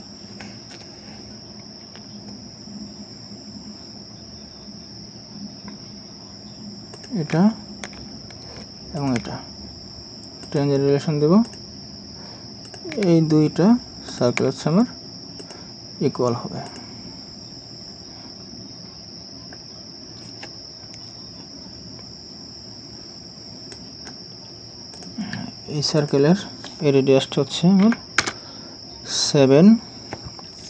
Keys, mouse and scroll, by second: 9.0 ctrl+click, 14.1 ctrl+click, 23.7 right click, 27.8 typing, 28.2 Return.